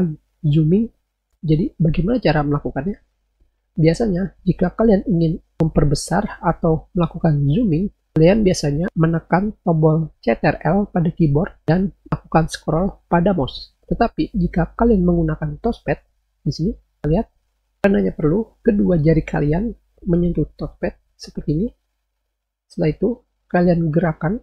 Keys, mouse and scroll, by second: 17.3 click.